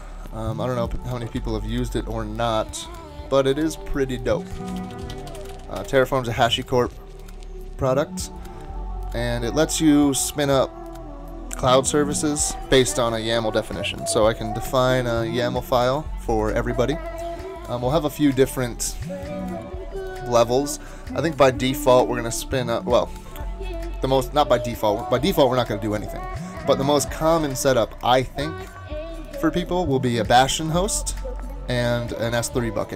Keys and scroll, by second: 1.4 ctrl+Tab, 4.3 super+t, 4.5-6.0 typing, 7.5 typing.